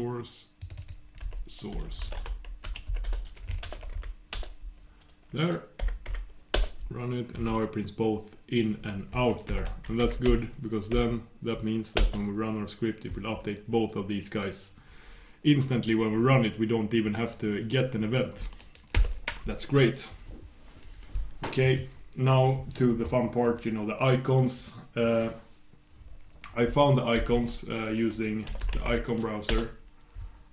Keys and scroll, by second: 3.8 shift+super+Return, 29.6 shift+super+Return.